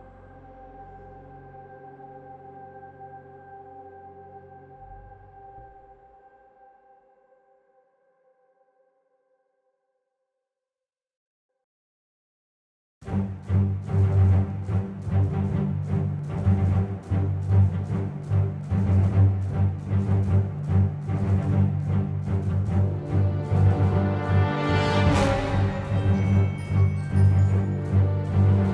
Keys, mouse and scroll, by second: 25.2 ctrl+z.